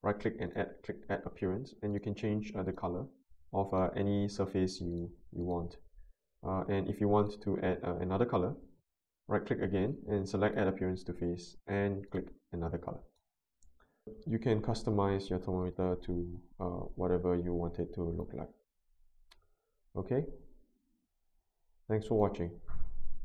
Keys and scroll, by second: 14.0 alt+Tab.